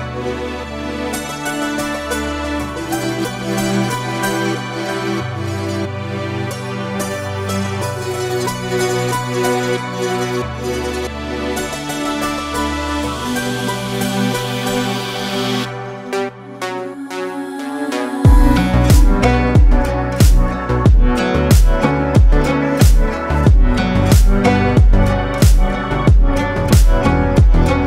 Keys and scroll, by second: 13.5 Tab, 17.7 KP_1, 23.5 shift+a, 24.6 Escape, 25.9 shift+s.